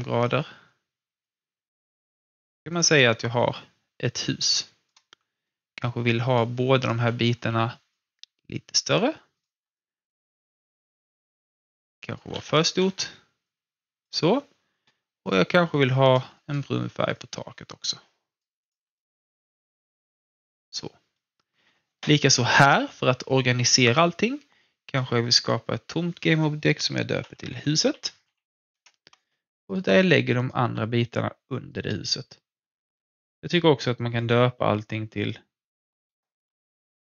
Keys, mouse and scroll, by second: 0.0-2.7 alt+drag, 3.0-5.6 drag, 7.3 r, 7.9-9.3 drag, 9.7-12.0 alt+drag, 12.3 ctrl+z, 12.9 ctrl+z, 13.4-18.6 drag, 18.9-20.8 alt+drag, 20.8-24.0 alt+middle drag, 24.9 click, 26.8-28.7 typing, 29.6 click, 30.4-33.1 shift+drag, 31.5 typing, 32.9-33.6 typing, 36.6-37.0 typing.